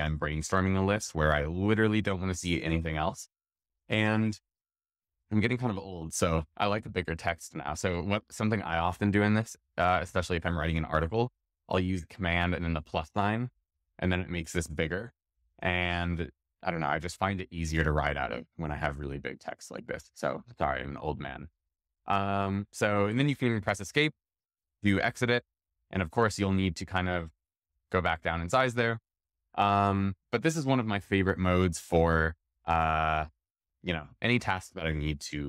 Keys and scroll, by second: 12.4 super+=, 15.9 super+=, 26.9 super+-, 30.9 super+-.